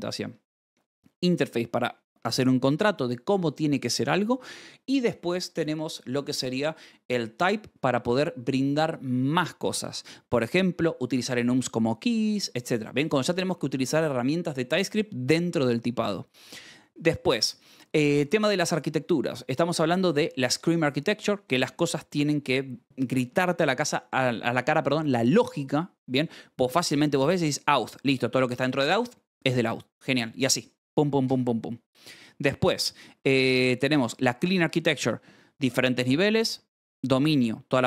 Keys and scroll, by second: 17.5-20.0 typing, 21.0 Escape, 31.7-33.0 typing, 32.7 Escape, 34.6 shift+v, 34.9 Escape.